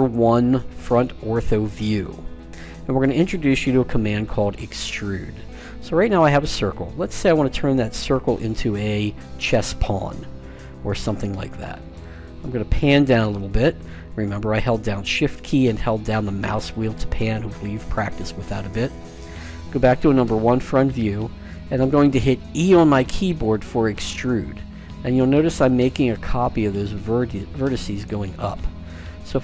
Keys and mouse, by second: 5.5-11.7 middle drag, 12.3-14.7 middle drag, 15.9 middle click, 19.6 KP_1, 22.6 e.